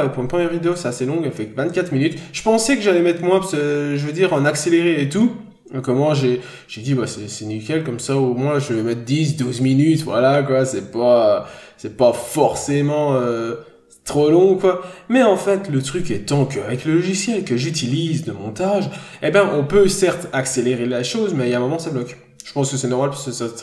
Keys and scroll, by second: 11.6 n, 15.8 scroll down 1, 15.9 n, 16.1 scroll up 1, 22.5 n, 23.2 b.